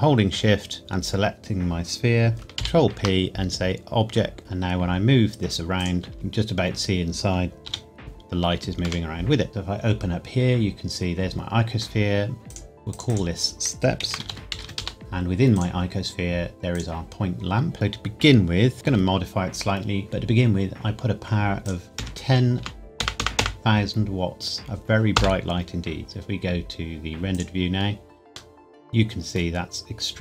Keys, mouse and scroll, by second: 0.8 shift+click, 2.5 ctrl+p, 5.7 g, 5.7 click, 6.1 middle click, 7.6 g, 8.8 Escape, 9.5 click, 12.4 click, 14.0 shift+s, 14.7 Return, 15.5 click, 18.7 click, 21.6 click, 21.9 KP_1, 22.5 KP_0, 25.1 KP_Enter, 27.3 click, 28.5 middle click.